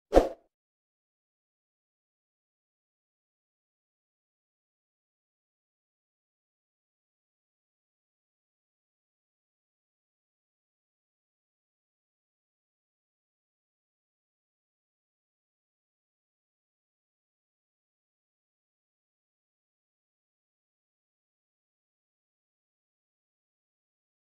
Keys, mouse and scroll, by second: 5.2-8.2 alt+middle drag, 11.8-14.9 alt+middle drag.